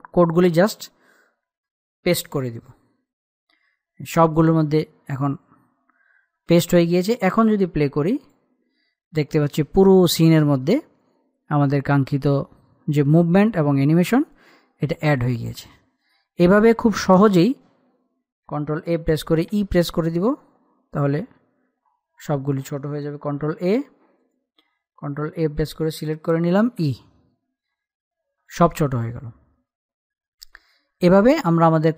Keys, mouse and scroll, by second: 0.1-1.2 scroll up 1, 1.4 alt+click, 2.9 ctrl+v, 4.9 click, 5.9-6.3 scroll down 1, 6.3-8.6 scroll up 1, 8.8 click, 9.1 click, 9.1 scroll up 1, 9.3 click, 15.7 click, 19.4-22.8 typing, 24.1 ctrl+a, 24.8 click, 25.7 ctrl+a, 27.4 e, 29.0 click, 30.1-31.9 middle drag.